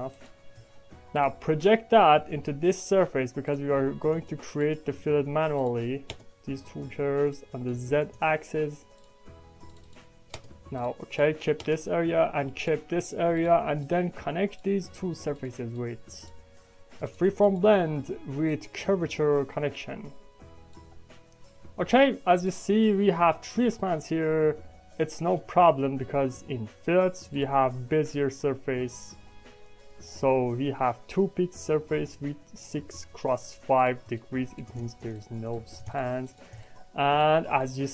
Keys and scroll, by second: 4.0 space, 6.0 space, 10.3 space, 11.6 space.